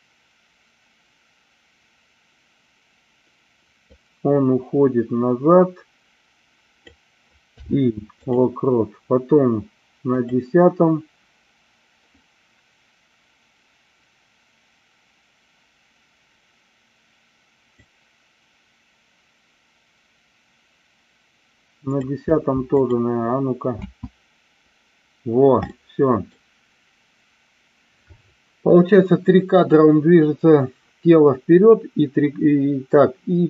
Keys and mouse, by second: 3.8-6.8 drag, 10.1 click, 17.8-22.0 drag, 23.7 space, 25.7 middle click.